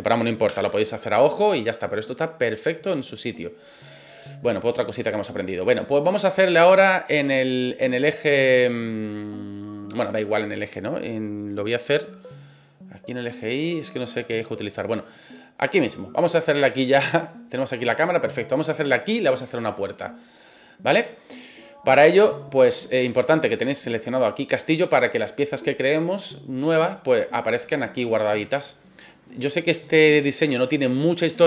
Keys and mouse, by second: 0.4 KP_1, 2.8-3.1 middle drag, 4.0-6.2 middle drag, 6.7-10.0 middle drag, 14.6-15.8 middle drag, 21.0-21.4 middle drag, 23.3 click.